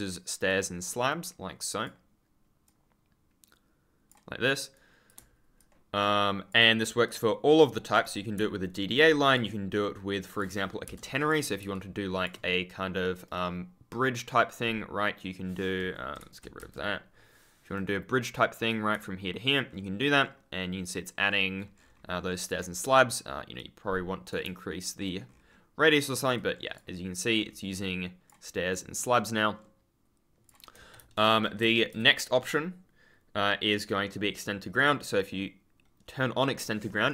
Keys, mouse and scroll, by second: 5.1 click, 5.5 ctrl+click, 5.9-6.4 scroll down 1, 9.2 click, 10.2 click, 10.8 BackSpace, 11.0 click, 11.7 ctrl+click, 13.2 right click, 16.1 BackSpace, 17.6 right click, 19.4 ctrl+click, 19.6-20.9 scroll up 1, 21.0 scroll down 1, 21.1-21.7 scroll up 1, 21.7-22.6 scroll down 1, 23.5 click, 24.8 ctrl+click, 25.2-26.1 scroll up 1, 26.2 ctrl+click, 26.5-27.1 scroll down 1, 27.1 ctrl+click, 27.3-28.2 scroll up 1, 29.5 scroll down 1, 30.9 d, 31.5 s, 34.7 click.